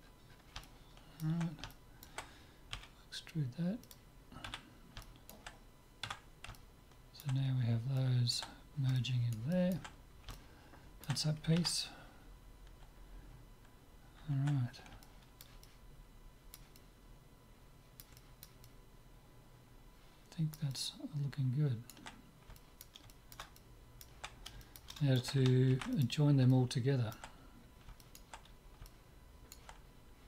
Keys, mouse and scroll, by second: 2.7 e, 4.4 z, 4.8-12.1 middle drag, 6.1 Tab, 15.0-20.6 middle drag, 20.7-25.7 middle drag, 25.7 ctrl+s, 26.4-30.2 middle drag.